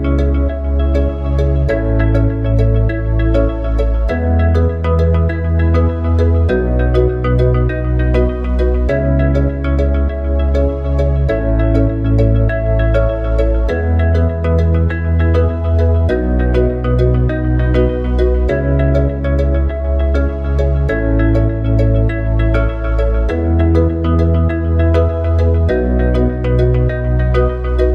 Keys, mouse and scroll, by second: 1.0 ctrl+r, 12.0 Tab, 19.7 click, 24.7 click.